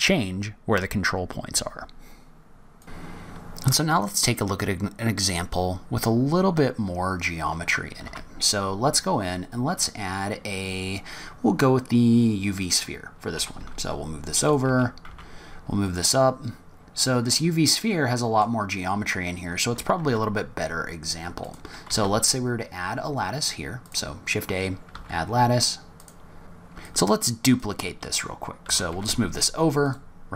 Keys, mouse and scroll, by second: 2.8 middle click, 2.8 scroll down 2, 8.0 shift+a, 13.3 g, 14.6 g, 16.2-16.6 scroll up 3, 17.0 middle click, 17.5 scroll down 1, 17.9 middle click, 20.0 shift+s, 21.8 shift+a, 24.9 s, 26.8 click, 28.6 shift+d.